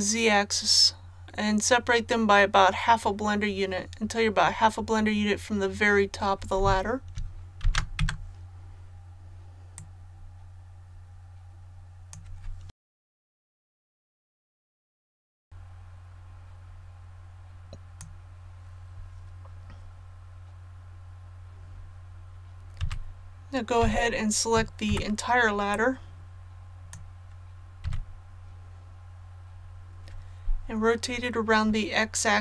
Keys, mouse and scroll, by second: 7.6 shift+d, 9.7-12.6 drag, 12.7 shift+d, 12.8 click, 13.2 click, 13.5 click, 13.8-15.3 typing, 13.9 click, 14.2 click, 14.5 click, 14.8 click, 15.1 click, 15.4-18.0 drag, 22.8-23.7 typing, 24.8 b, 25.6-27.0 drag, 27.8 z, 32.3-32.4 typing.